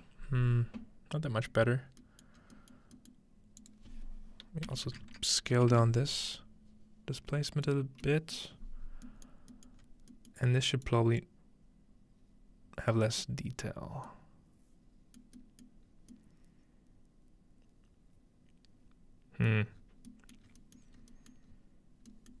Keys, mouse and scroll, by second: 1.5 middle click, 1.8-2.4 scroll down 2, 2.4 scroll up 2, 3.6-5.3 drag, 4.7-6.2 typing, 7.3 middle click, 7.8-9.8 scroll down 2, 9.8 scroll up 1, 10.0 middle click, 10.3-12.2 middle drag, 10.9-12.2 drag, 10.9-12.2 scroll up 1, 15.7 middle click, 15.9-17.5 scroll up 1, 17.5-19.5 scroll up 1, 19.7 middle click, 19.8-20.5 scroll down 2, 20.4-22.2 middle drag, 20.5-22.4 scroll up 7.